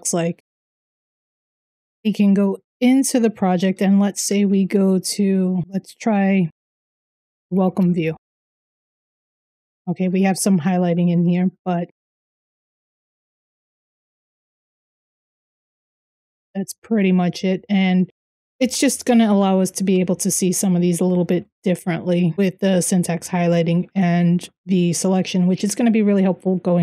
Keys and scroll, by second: 0.2-1.6 typing, 1.9 Return, 3.9 ctrl+p, 6.6-22.8 typing, 25.9 j.